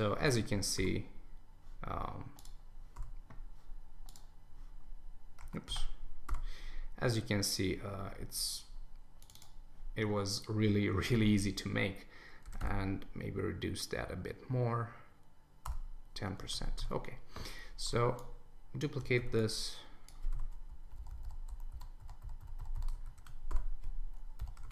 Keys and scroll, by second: 5.7 alt+super+z, 15.6 Return, 16.4 super+s, 20.7 Down, 21.7 Up, 22.9 super+s, 23.2 super+1, 24.4 Down, 24.6 super+s.